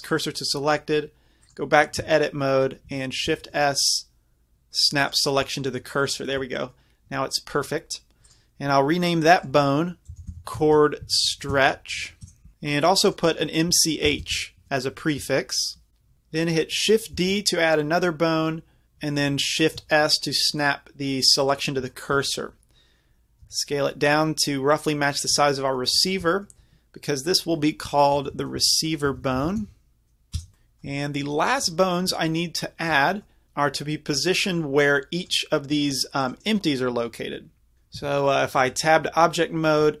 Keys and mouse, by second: 2.1 Tab, 3.3 shift+s, 8.3-13.8 drag, 16.1 ctrl+z, 17.2 shift+d, 19.8 shift+s, 23.5 s, 25.4-30.6 drag, 35.2-36.4 drag, 38.0 Tab, 38.6-40.0 drag.